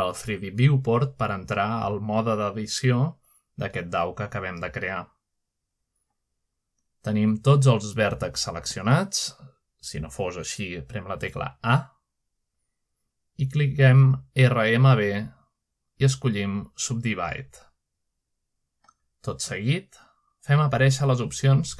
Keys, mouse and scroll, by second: 0.0 Tab, 1.5 shift+middle click, 5.3 middle click, 5.7-6.6 scroll up 1, 6.6-6.9 scroll up 1, 7.3 middle click, 7.7-10.5 drag, 11.8 a, 12.9-15.5 middle drag, 15.5 right click, 19.2 click.